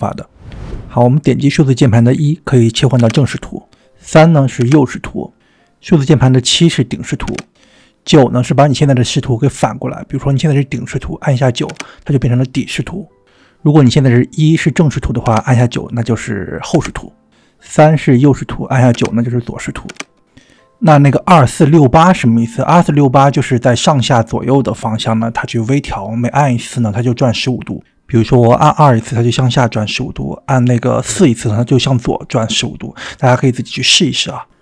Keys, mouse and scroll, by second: 0.8 click, 3.1 KP_1, 11.9 KP_9, 15.1 KP_1, 16.6 KP_9, 19.8 KP_9, 27.8-34.6 typing.